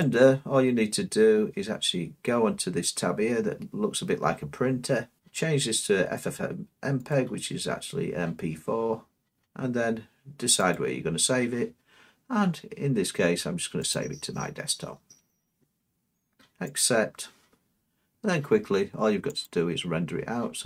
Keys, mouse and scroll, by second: 0.0 click, 0.7-1.4 scroll up 8, 1.4 middle click, 5.2 click, 7.1-8.2 drag, 10.7-11.9 drag, 12.9-13.8 scroll up 4, 13.8 scroll, 14.1 click, 16.8-18.0 drag, 19.4-20.5 drag.